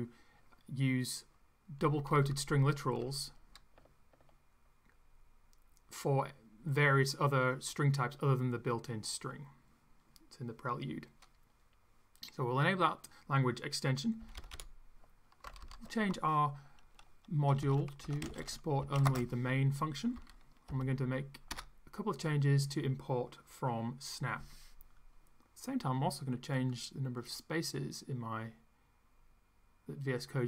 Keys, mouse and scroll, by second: 1.8 Down, 14.2 Up, 15.4 ctrl+Left, 17.3-19.3 typing, 20.1 Down, 20.7 Return, 21.5 BackSpace, 26.7 click.